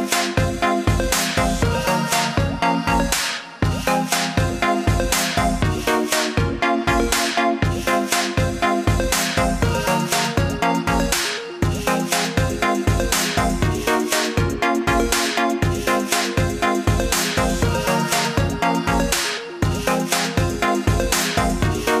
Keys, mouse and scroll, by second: 0.3 click, 8.1 click, 14.3 click, 18.9 alt+scroll up 1, 20.2 click.